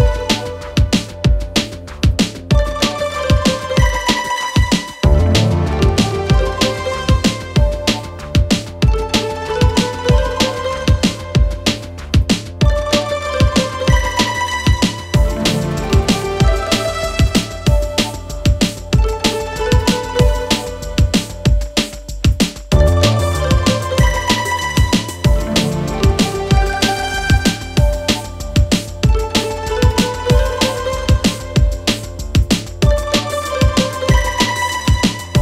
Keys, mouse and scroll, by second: 1.0-5.6 drag, 10.2 click, 12.4-21.1 drag, 27.6 right click, 28.3 click, 32.7-34.6 shift+drag.